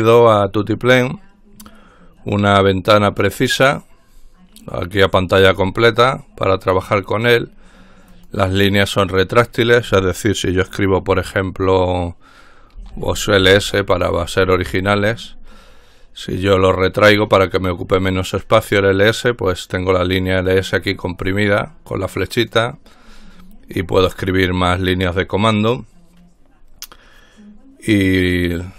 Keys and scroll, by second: 12.9-13.6 typing.